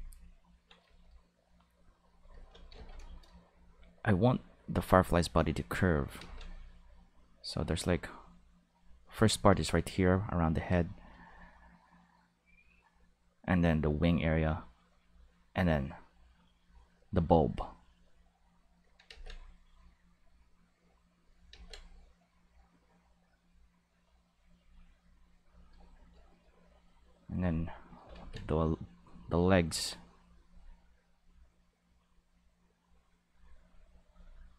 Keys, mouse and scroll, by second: 2.7 ctrl+z, 4.1-5.2 drag, 6.1 ctrl+z, 6.8 click, 7.5 click, 8.4 click, 12.0 click, 13.6 click, 14.5 click, 15.4-17.0 drag, 19.0 ctrl+z, 19.6-21.0 drag, 21.5 ctrl+z, 22.2 click, 23.2-24.3 drag, 24.9 click, 25.2 click, 26.8 click, 27.0 click, 28.1 ctrl+z, 28.4 click, 29.4 click, 30.6 click, 31.8 click, 32.5 click, 33.4 click.